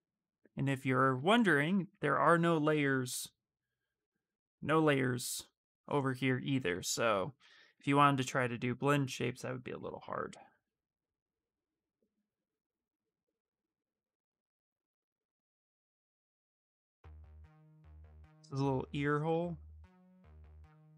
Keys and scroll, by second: 9.3-10.2 typing.